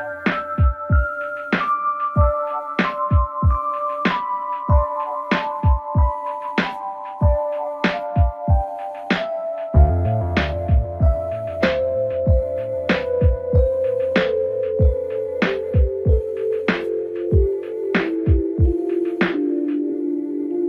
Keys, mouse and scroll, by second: 0.2-0.8 shift+middle drag, 0.8 scroll up 2, 1.6 Tab, 2.9 click, 3.7-4.3 scroll down 2, 4.3 g, 8.1 g, 10.6-11.2 scroll up 3, 11.2-12.5 shift+middle drag, 12.5 click, 13.7 g, 17.4-17.9 scroll down 3, 17.9-20.2 middle drag, 20.2 KP_1.